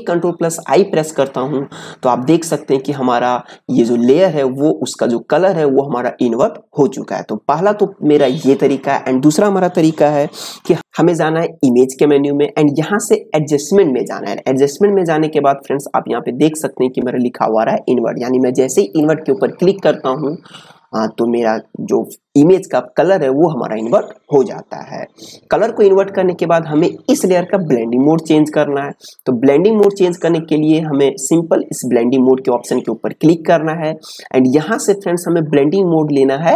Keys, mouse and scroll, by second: 10.4 ctrl+i, 11.6 click, 18.9 click, 33.0 click.